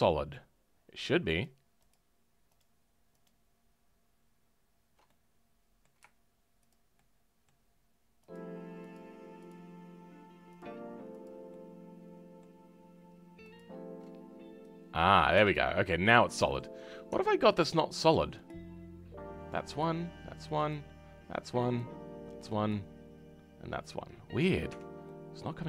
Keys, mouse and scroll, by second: 1.4 shift+click, 1.9 shift+click, 5.0-6.7 middle drag, 6.7 shift+click, 6.9-8.3 shift+middle drag, 8.3 shift+click, 8.9 shift+click, 11.5-13.5 shift+middle drag, 13.5 shift+click, 14.7 click, 15.3 Tab, 15.6-16.0 scroll down 2, 16.0-17.0 middle drag, 17.0 Tab, 17.3-18.4 scroll up 1, 18.4 click, 19.8 click, 25.0-25.6 middle drag.